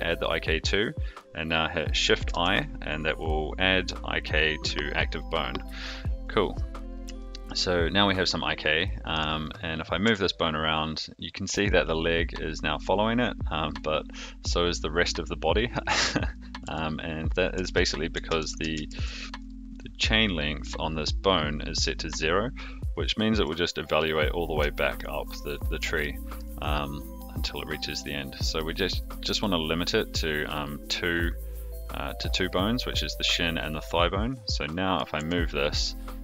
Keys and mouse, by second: 2.2 shift+i, 7.1 shift+middle drag, 8.6-9.1 middle drag, 9.4 click, 10.0 g, 16.6 g, 17.6 ctrl+z, 18.2 ctrl+z, 19.0 ctrl+z, 19.3 click, 19.7 middle drag, 23.1 shift+middle drag, 24.7 shift+middle drag, 26.0 shift+middle click, 28.4 click, 28.9 click, 34.2 click, 34.6-34.9 middle drag, 35.1 g.